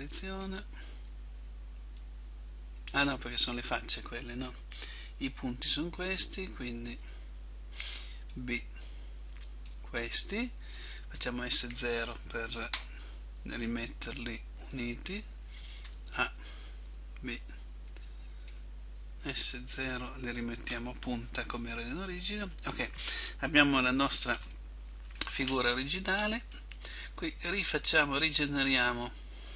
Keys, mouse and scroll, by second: 5.1 click, 7.2 a, 11.4 s, 13.7 middle click, 16.0 a, 18.6 b, 19.5 s, 21.6 middle click, 24.2 a, 24.6 a.